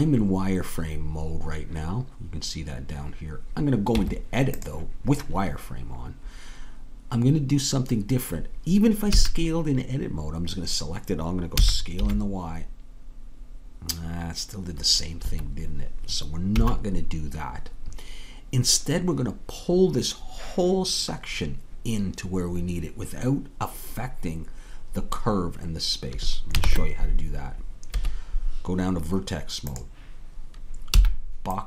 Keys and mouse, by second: 4.0 Tab, 9.1 a, 16.6 a, 26.6 ctrl+Tab, 30.2-31.6 drag, 31.0 b.